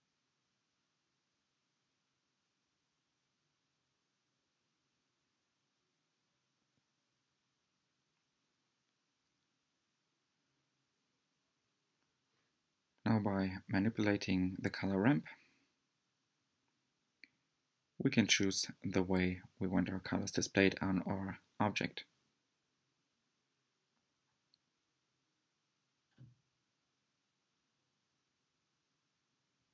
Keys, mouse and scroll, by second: 8.3-8.8 scroll up 3, 9.0-12.3 middle drag, 12.3 scroll down 1, 13.6-17.4 middle drag, 17.4-20.5 drag, 24.1-27.0 drag, 28.5-29.7 middle drag.